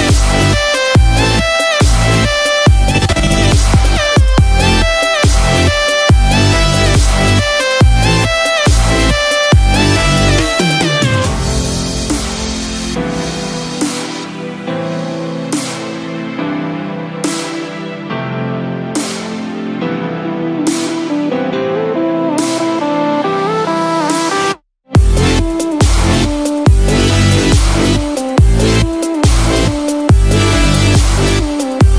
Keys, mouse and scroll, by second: 1.9 click, 4.9 click, 10.8 middle click, 10.8 click, 10.8 scroll down 1, 11.5 click, 14.4 ctrl+z, 15.7 ctrl+z, 17.9 ctrl+z, 18.0 ctrl+z, 20.8 ctrl+shift+z, 22.8 middle click, 22.8-23.3 scroll down 1, 26.5 click, 26.5 scroll up 1, 28.6 click.